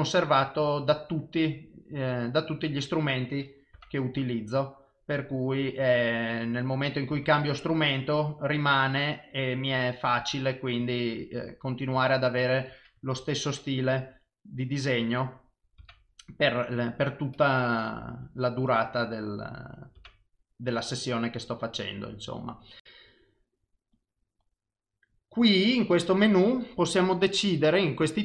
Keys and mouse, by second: 0.8 click, 4.5 click, 7.9 click, 11.0 click, 16.6 click, 24.0 click.